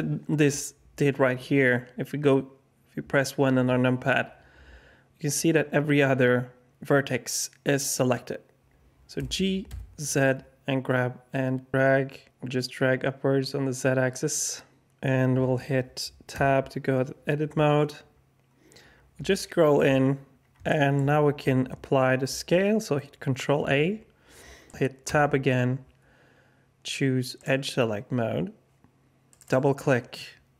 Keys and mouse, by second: 3.5 KP_1, 9.2 g, 16.3 Tab, 20.6 shift+drag, 23.5 ctrl+a, 25.1 Tab, 27.3 click, 29.4-30.5 drag.